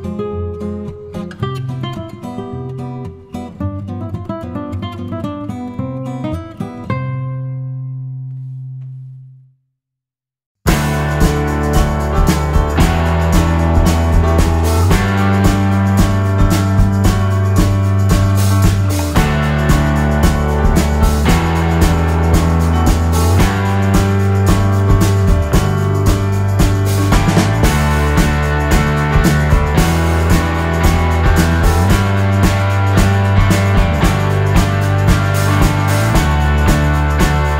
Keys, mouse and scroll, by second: 0.2 shift+click, 0.6 shift+click, 1.7 shift+click, 2.3 shift+click, 5.0 click, 5.9-7.6 drag, 7.4 Delete, 7.7 click, 8.4 Delete, 9.8 click, 10.5 KP_Subtract, 11.8 click, 12.7 click, 13.0 middle click, 14.4 click, 14.8 middle click, 15.8 KP_Subtract, 16.5 click, 17.5 Escape, 20.2 shift+click, 20.8 shift+click, 21.2 shift+click, 21.9 shift+KP_Add, 22.5 click, 23.6 shift+click, 24.0 shift+click, 25.9 shift+click, 27.6 shift+click, 28.1 shift+click, 29.0 ctrl+shift+z, 29.4 ctrl+shift+click, 30.3 shift+click, 30.8 shift+click, 31.3-33.5 shift+drag, 33.7 shift+F1, 34.1 shift+middle click, 34.6 shift+F2, 35.5 click, 36.0 Delete, 36.7 click, 37.1 Delete, 37.3 click.